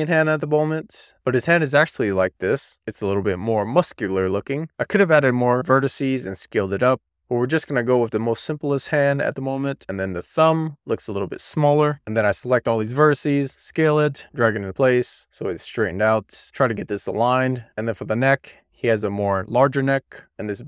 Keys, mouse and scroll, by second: 0.6 alt+z, 0.9-1.4 scroll down 3, 1.4 alt+z, 1.7 middle click, 2.9-9.7 middle drag, 10.0 click, 11.8 middle click, 11.9 alt+z, 12.3 click, 12.5 e, 13.2 middle click, 13.5 alt+z, 13.8 w, 13.9 click, 14.2 e, 14.6 click, 15.0 shift+middle click, 15.6 alt+z, 15.7 middle click, 16.0 shift+click, 16.2 middle click, 16.7 middle click, 16.9 super+z, 17.3 click, 17.6 middle click, 18.2 alt+z, 18.4 shift+middle click, 18.6 scroll down 1, 18.9 middle click, 19.2 scroll up 1, 19.3 middle click, 19.4 Tab, 19.6 Tab, 19.8 alt+z, 19.8 shift+middle click, 20.4 click.